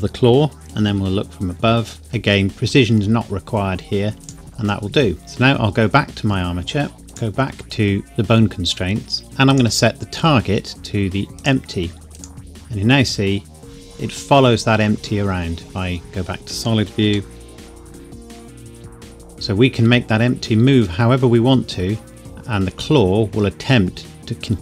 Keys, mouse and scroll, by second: 0.9 KP_7, 2.0 KP_Decimal, 4.1 g, 4.2 click, 4.4 KP_1, 5.2-7.0 scroll down 1, 7.0 click, 9.5 click, 12.5 g, 14.8 Escape, 16.0 click, 17.0 g, 24.0 Escape, 24.5 scroll down 1.